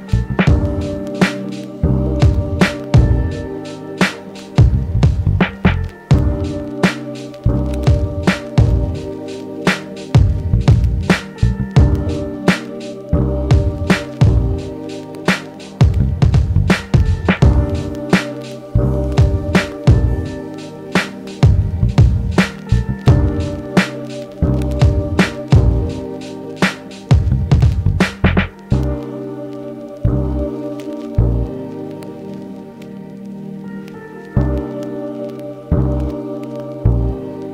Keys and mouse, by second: 8.4 g, 10.6 f, 11.0 middle click, 11.3-30.9 drag, 13.2 ctrl+z, 20.7 ctrl+z, 31.5-33.4 alt+drag, 33.4 f, 33.7-37.5 drag, 35.4 middle click.